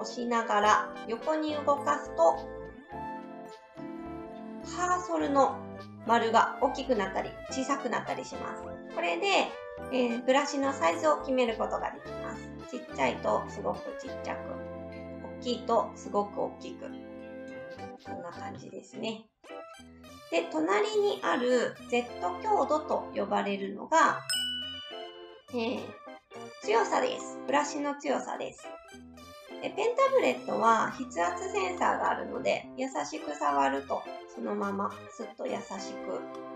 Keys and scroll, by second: 18.1 ctrl+z, 18.5 ctrl+z.